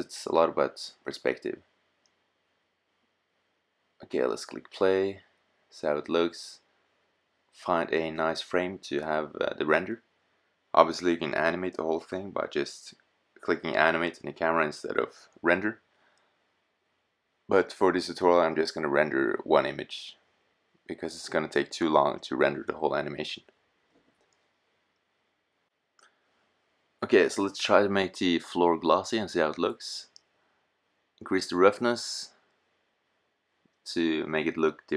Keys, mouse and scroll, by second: 3.5 click, 4.2 middle click, 4.7 click, 9.3-12.1 drag, 24.5-28.7 right drag, 28.7 click, 31.4-33.1 drag.